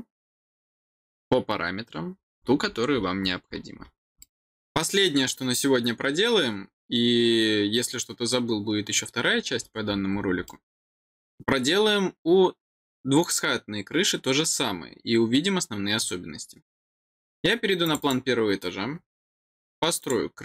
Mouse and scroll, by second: 2.1-3.8 scroll down 10, 4.1 middle click, 9.5-10.4 scroll down 6, 10.4 middle click, 17.8 click, 17.9 click, 19.9 click.